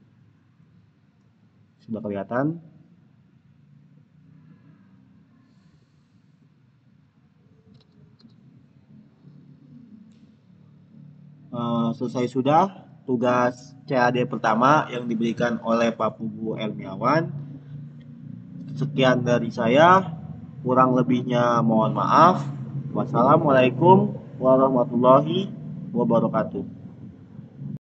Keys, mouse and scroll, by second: 1.1 click, 5.2 scroll down 1, 6.1 middle click, 6.8 click, 8.6 middle click, 9.6-10.6 scroll up 1, 13.2 scroll down 1, 26.4 click.